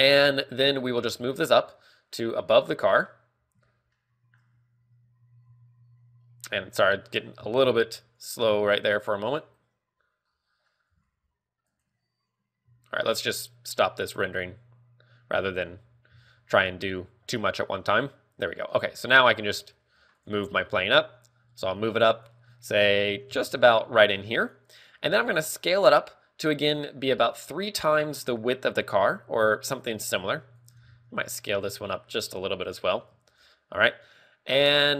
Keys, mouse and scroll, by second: 0.7 scroll up 1, 6.0 click, 6.0 shift+middle click, 6.0-6.6 scroll up 1, 6.0 g, 7.9 Escape, 7.9 scroll down 1, 8.5 click, 9.4 shift+middle click, 17.9 click, 18.0 scroll down 1, 18.0 z, 19.2 g, 20.7 right click, 20.9 g, 22.7 click, 23.8 g, 24.9 click, 25.6 s, 30.2 click, 30.6 a, 31.0 right click, 31.2 s, 33.3 click, 33.6 a, 33.8 right click.